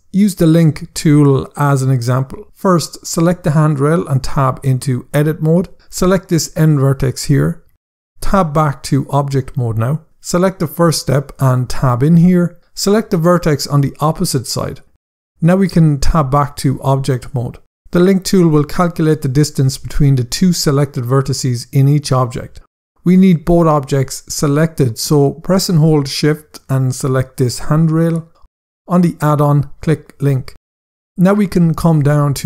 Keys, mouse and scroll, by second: 2.4 click, 3.7 Tab, 6.0 click, 8.3 Tab, 10.4 click, 11.5 Tab, 13.1 click, 16.1 Tab, 27.0 shift+click, 29.6 click, 31.2 scroll down 1.